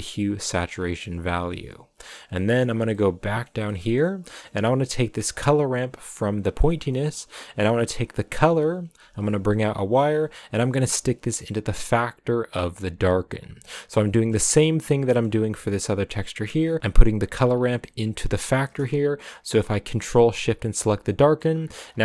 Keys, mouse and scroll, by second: 0.7-2.3 scroll up 5, 2.3 scroll up 1, 2.4-4.1 middle drag, 4.1-5.2 scroll up 1, 5.2-12.5 drag, 13.7 middle click, 14.2 scroll up 2, 14.8-15.3 scroll up 4, 15.3-16.5 middle drag, 16.5-17.4 scroll down 3, 17.4-19.5 scroll down 1, 19.5-20.1 scroll down 1, 20.1 ctrl+shift+click, 21.0 middle click, 21.3-21.9 scroll up 10.